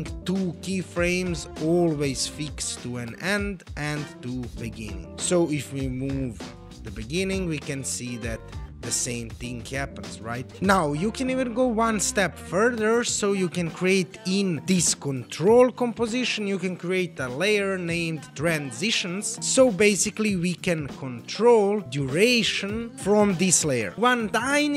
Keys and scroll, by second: 6.6 space, 9.0 space.